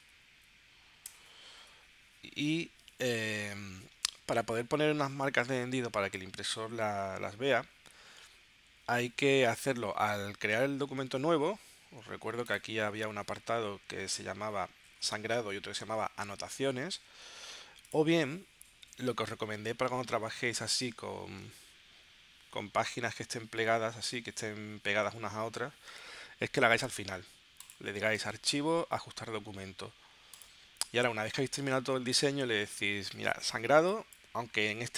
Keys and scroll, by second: 0.0-1.0 typing, 1.1 Return, 10.5 super+n.